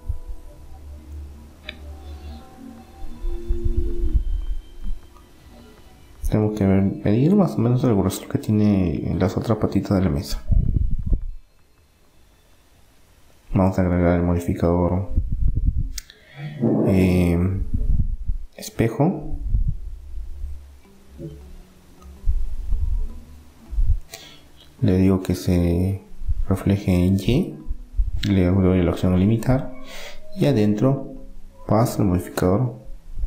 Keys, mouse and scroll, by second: 0.6 middle click, 1.5 middle click, 1.9 KP_1, 2.9-4.7 middle drag, 6.3 s, 8.6 middle click, 9.2 click, 10.2-12.1 middle drag, 11.0 Tab, 12.8-15.6 drag, 24.9-28.0 drag, 28.0 middle click, 28.6-30.4 drag, 31.1-33.0 drag.